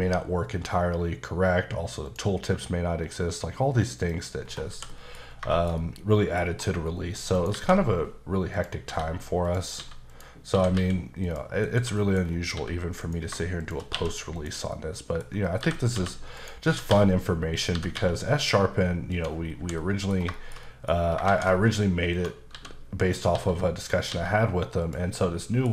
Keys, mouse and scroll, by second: 2.0 click, 4.0 click, 4.4-4.7 scroll down 1, 4.7 h, 4.9 middle click, 5.2 scroll down 2, 5.5 shift+middle click, 6.4 scroll up 1, 7.3 shift+right click, 7.5 shift+a, 8.5 click, 8.8-12.5 typing, 9.4 click, 10.1 click, 11.2 click, 12.0 middle click, 12.2-12.5 scroll down 2, 13.0 click, 13.6 shift+click, 13.9 q, 14.3 click, 14.7 middle click, 15.4 middle click, 15.6-18.0 typing, 16.3 right click, 17.5 click, 19.1 click, 19.4 scroll down 2, 19.6 h, 19.8 middle click, 20.3 shift+middle click, 21.0 scroll up 2, 21.2 shift+a, 22.1 click, 22.5 s, 23.0 click, 23.3 s, 23.8 click, 24.1 s, 24.8 click, 25.1 middle click.